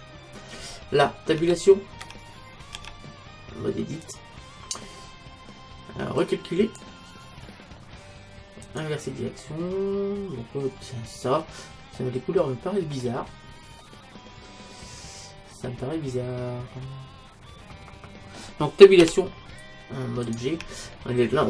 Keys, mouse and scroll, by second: 1.4 Tab, 2.0 Tab, 2.8 Tab, 6.3-8.1 drag, 8.6-10.6 drag, 9.4-11.4 middle drag, 12.0-15.6 middle drag, 19.0 Tab.